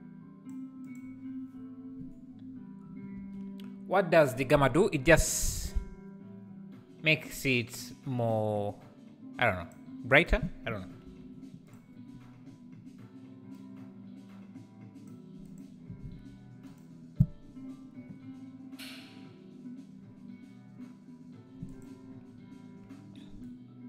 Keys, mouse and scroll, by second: 10.1-11.8 drag, 13.7-16.8 drag, 21.9 click.